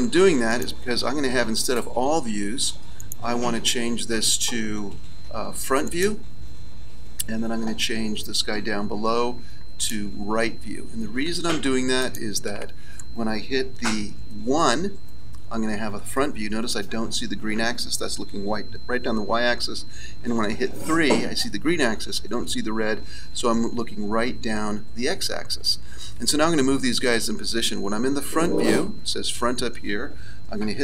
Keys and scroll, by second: 14.4 KP_1, 20.3 KP_3.